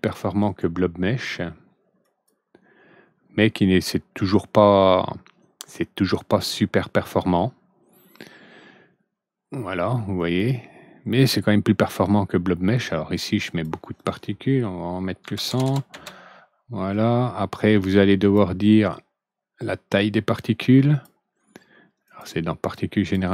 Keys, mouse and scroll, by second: 0.3 right click, 1.9 click, 10.1 click, 13.1 click, 15.2 ctrl+n, 18.1 click, 19.9-20.9 drag, 22.0 click, 22.7-23.1 drag.